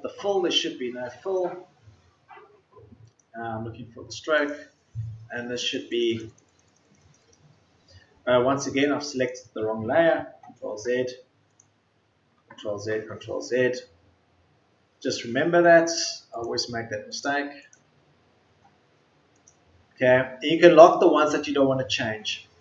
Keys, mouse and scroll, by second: 10.6 ctrl+z.